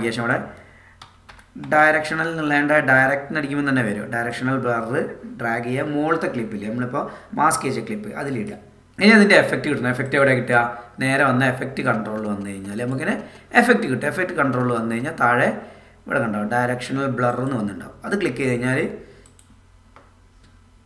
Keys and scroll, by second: 1.0 d.